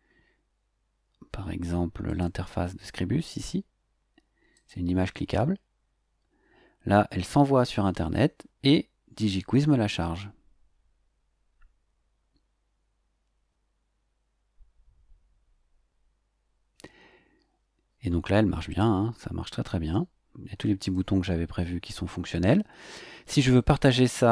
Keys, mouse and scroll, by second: 0.5-0.8 scroll down 1, 2.0 click, 4.5 click, 18.7 click, 20.8 click.